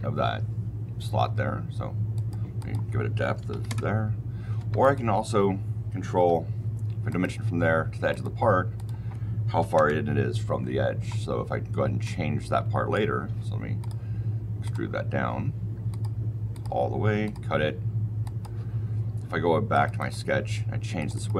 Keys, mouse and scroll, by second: 2.1 click, 2.5 click, 3.3 KP_Decimal, 3.4 KP_5, 3.6 KP_Enter, 4.5 Escape, 4.7 click, 5.2 Delete, 6.1 d, 7.0 click, 8.0 click, 8.7 click, 9.5 KP_1, 9.7 KP_Enter, 11.9 click, 13.7 click, 14.5 click, 15.8 click, 16.4 click, 17.2 click, 18.1 click, 19.6 click, 19.9 click, 20.9 click, 21.0 click.